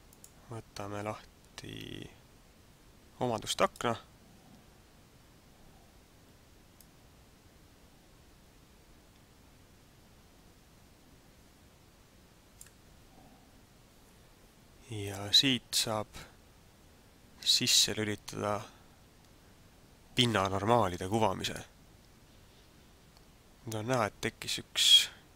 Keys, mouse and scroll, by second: 0.1 click, 6.8 click, 21.3 click, 22.7-23.3 scroll up 3.